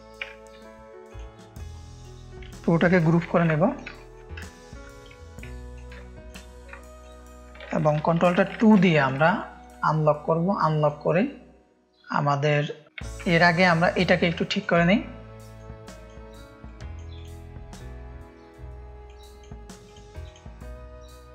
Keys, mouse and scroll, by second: 0.5 Left, 1.0 click, 1.7 click, 3.3 ctrl+g, 3.9 click, 3.9 space, 4.4 ctrl+click, 4.4 space, 5.5 click, 5.6 space, 5.9 ctrl+click, 6.9 click, 6.9 space, 8.5 ctrl+alt+2, 9.2 space, 9.3 click, 10.7 click, 12.5 click, 13.0 ctrl+2, 13.8 click, 14.5 ctrl+space, 14.5 ctrl+click, 15.9-16.9 drag, 17.1 drag, 19.0 click, 19.8-21.3 drag.